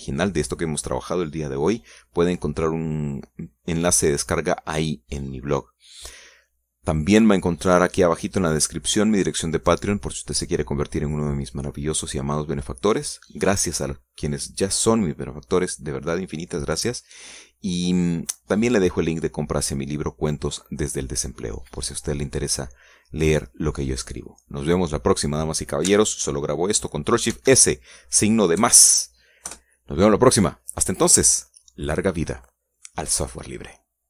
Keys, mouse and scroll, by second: 28.6 ctrl+shift+s, 29.9 KP_Add, 30.8 KP_Enter.